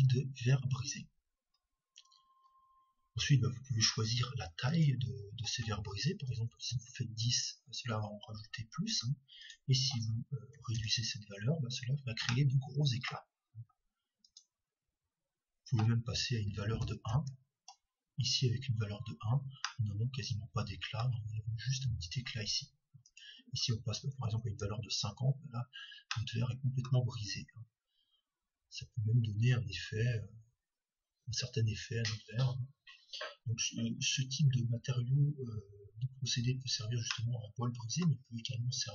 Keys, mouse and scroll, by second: 4.7-6.7 drag, 9.6-11.2 drag, 12.3-14.7 middle drag, 15.3-16.6 drag, 20.3-22.7 middle drag, 23.4-25.4 drag, 26.8-28.2 middle drag, 37.6-38.9 middle drag.